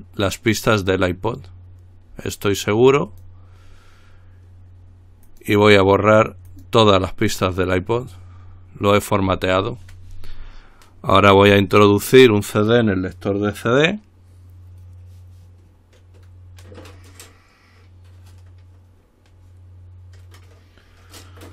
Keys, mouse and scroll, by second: 3.3 click, 5.5 click, 6.7 click.